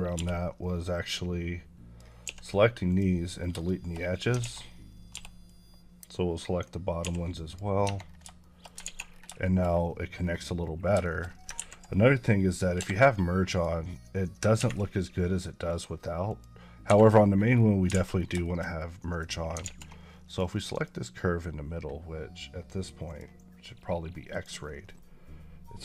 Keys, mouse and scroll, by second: 0.0 b, 0.7 click, 2.1 x, 2.7 click, 3.2 scroll down 2, 3.5 shift+middle click, 4.0 scroll up 1, 5.0 b, 5.3 click, 7.3 click, 7.7 Tab, 7.9 scroll down 2, 8.3 shift+middle click, 8.7 alt+z, 9.0 scroll down 3, 9.3 shift+middle click, 9.5 scroll up 1, 10.0 scroll down 2, 10.2-10.6 scroll up 4, 10.9 shift+middle click, 12.6 Escape, 13.4 click, 15.5 click, 16.7 Escape, 17.1 scroll down 1, 17.9 a, 18.0 scroll down 1, 18.3 shift+middle click, 19.5 alt+z, 20.1 click, 21.8 click.